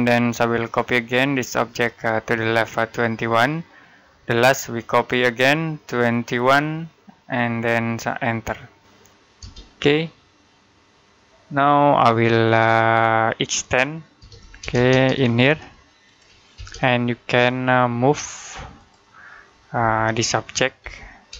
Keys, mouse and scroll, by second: 0.3 click, 0.8 space, 1.0 click, 2.8-3.2 typing, 4.2 click, 5.0 space, 5.3 click, 7.0-7.9 typing, 12.6 middle click, 13.8-14.6 typing, 15.9 shift+click, 16.4 space, 18.6 click, 19.7 Delete, 20.7 m, 21.2 space.